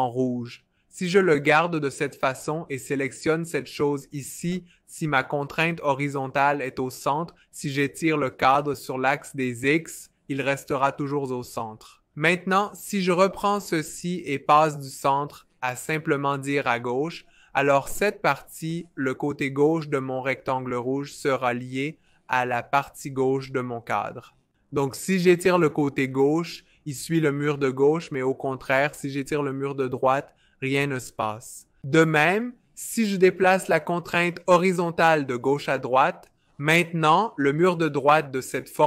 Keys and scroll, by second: 0.0-0.6 typing, 7.1 v, 17.6 v.